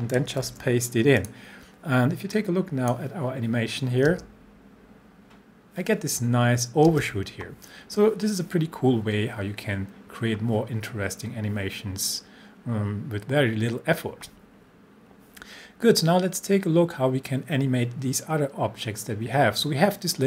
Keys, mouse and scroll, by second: 0.4 ctrl+v, 1.2-3.0 drag, 4.1 space, 6.9 space.